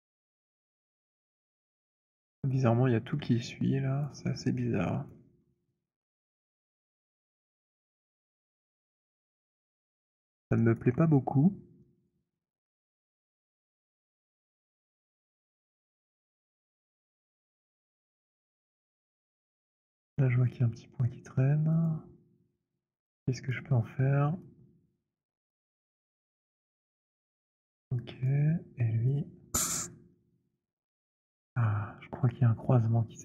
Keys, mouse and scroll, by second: 0.2 alt+middle click, 1.1 alt+click, 1.6 alt+middle click, 2.4 alt+click, 3.9 alt+click, 4.8 alt+middle click, 5.1 alt+click, 5.5 alt+click, 7.3 right click, 8.2 alt+middle click, 9.7 click, 10.0 alt+right click, 10.5 alt+middle click, 10.7 alt+right click, 12.2 click, 16.3 click, 19.5 alt+right click, 20.3 alt+middle click, 21.8 click, 23.6 click, 27.1 click, 28.3 click, 29.6 click.